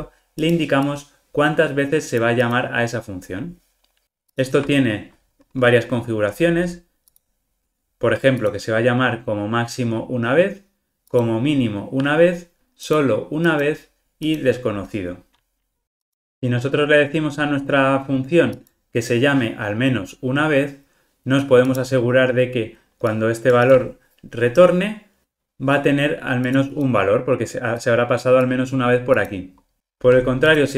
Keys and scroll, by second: 4.3 super+b, 4.5 super+b, 17.4 alt+super+[.